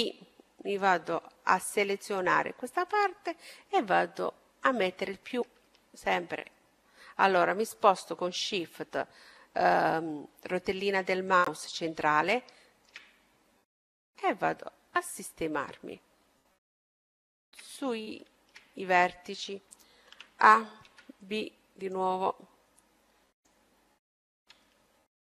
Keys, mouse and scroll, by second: 1.6-2.8 middle drag, 2.8-4.4 drag, 4.7-9.6 middle drag, 11.4-14.3 middle drag, 13.7-15.5 drag, 15.6-17.2 scroll up 1, 17.2-19.9 middle drag, 19.9 scroll down 1, 20.1 middle click, 20.1 a, 20.8 b, 24.0-25.3 middle drag.